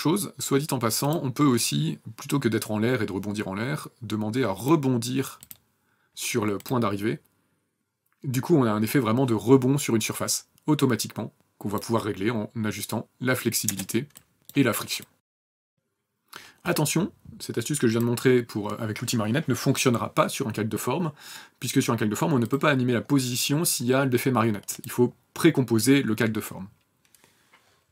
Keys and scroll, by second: 13.0 KP_0, 14.8 KP_0.